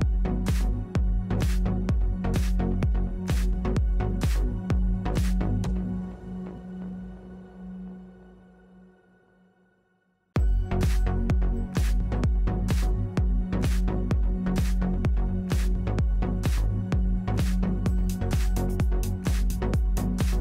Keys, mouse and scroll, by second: 2.2 ctrl+e, 4.7 KP_7, 5.1 z, 5.9-7.9 drag, 8.3 r, 9.4-10.7 drag, 11.3 Tab, 12.4 w, 15.0 KP_7, 16.4-18.5 drag, 19.0 Tab, 19.3 click, 19.9 w.